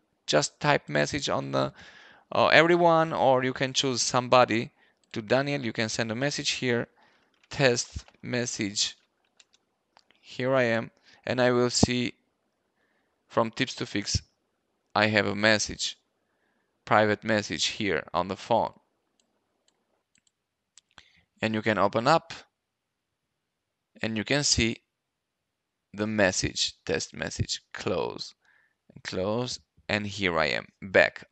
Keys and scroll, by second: 6.6-9.7 typing.